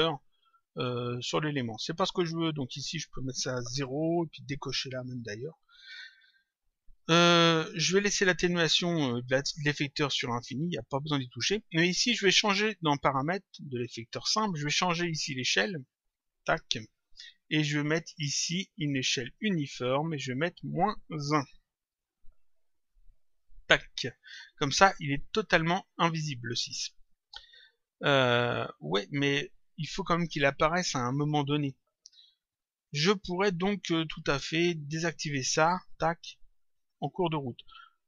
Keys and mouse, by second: 2.5 click, 4.6 click, 9.3 click, 10.7 click, 16.0 click, 19.3 click, 23.2 click, 34.8 click, 36.6 click.